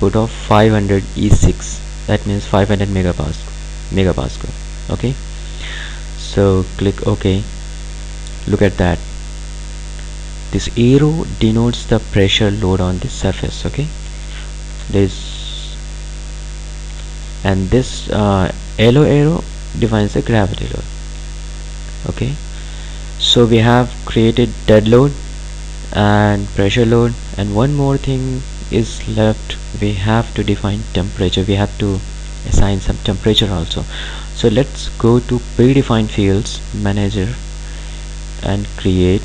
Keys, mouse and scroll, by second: 6.8 click, 8.7-9.2 scroll up 1, 9.2 scroll down 1, 14.1-16.1 ctrl+alt+drag, 21.1 click, 27.8 click, 30.3 ctrl+alt+click, 35.7-39.2 drag.